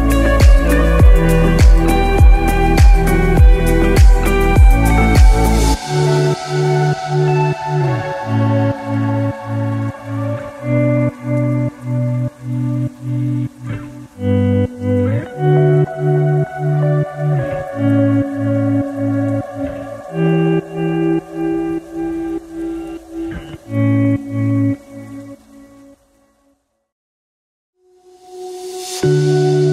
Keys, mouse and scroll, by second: 1.6-2.4 scroll up 6, 2.4 scroll down 1, 2.8 shift+middle click, 3.4 scroll up 3, 3.8 scroll down 1, 5.0 ctrl+r, 11.3-12.4 scroll down 1, 12.4 ctrl+r, 15.0-15.4 scroll down 4, 15.4 middle click, 16.8-17.3 scroll up 5, 17.3 shift+middle click, 18.0 scroll up 1, 18.0 middle click, 18.9 shift+middle click, 19.9-20.5 scroll up 3, 20.5 shift+middle click, 21.1 middle click, 25.5 alt+click, 27.3 s.